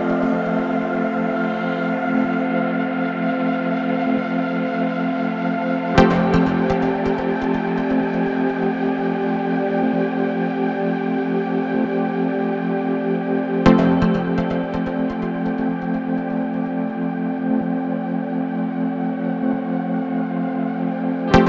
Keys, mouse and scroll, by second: 0.7-2.4 middle drag, 2.4 Tab, 3.2 Tab, 4.2 ctrl+r, 6.3 Tab, 6.7 scroll down 2, 6.8-9.4 middle drag, 9.4 KP_7, 10.7 scroll up 1, 10.9 scroll down 1, 11.2-12.3 middle drag, 12.3 scroll up 2, 12.9 KP_1, 13.7 Tab, 14.2-15.0 scroll up 1, 15.5 ctrl+r, 17.5 scroll down 2, 17.8 middle click, 18.7 KP_7, 19.9 Tab, 21.0 Tab.